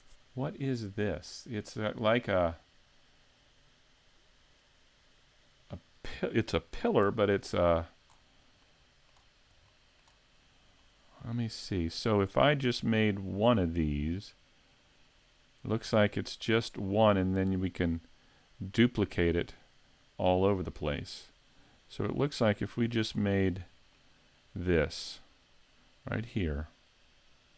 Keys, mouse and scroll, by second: 1.3-2.1 scroll up 1, 2.1 middle click, 2.1-2.9 scroll up 1, 2.9-4.5 scroll down 1, 4.6 middle click.